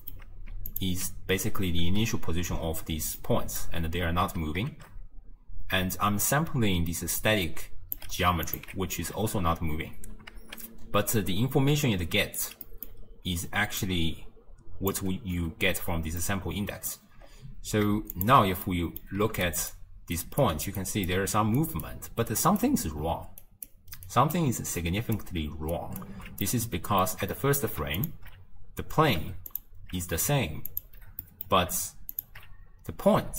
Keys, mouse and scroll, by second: 0.8 alt+shift+click, 1.9 shift+space, 2.6 space, 3.2-4.3 middle drag, 4.3 space, 6.6 d, 7.2 d, 7.2-8.0 drag, 8.0 d, 8.5 alt+shift+click, 9.2 space, 10.0 space, 11.2 d, 11.4-12.4 right drag, 12.4 d, 12.5 d, 12.7 middle click, 13.1-13.4 scroll down 2, 13.4 d, 13.9-15.0 drag, 15.0 d, 16.2-17.2 middle drag, 17.2-17.6 scroll down 2, 18.2 alt+shift+click, 18.7-19.5 middle drag, 19.5 ctrl+alt+right click, 20.2 ctrl+alt+right click, 20.8 ctrl+alt+right click, 21.6 ctrl+alt+right click, 22.3 ctrl+alt+right click, 23.5 ctrl+alt+right click, 24.1 ctrl+alt+right click, 24.8 ctrl+alt+right click, 25.8 ctrl+alt+right click, 26.5-28.0 middle drag, 28.0 alt+shift+click, 29.5 alt+shift+click, 30.8 alt+shift+click, 31.3-32.2 middle drag, 32.2 alt+shift+click.